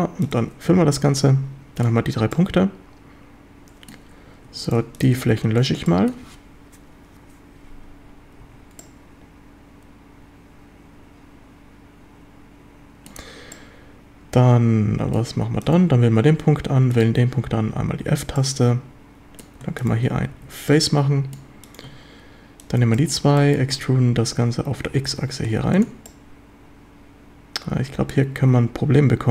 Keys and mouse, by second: 1.0 a, 1.2-1.9 drag, 2.3-3.9 drag, 4.5 3, 5.2 x, 5.9-6.2 shift+drag, 8.4 1, 8.8-13.1 middle drag, 13.5-15.1 middle drag, 18.4-19.4 drag, 18.4 f, 20.1 f, 20.3 a, 20.7-21.3 drag, 23.0 shift+click, 23.4 click, 23.7 e, 24.9 x, 25.8 ctrl+click, 26.1-28.1 drag.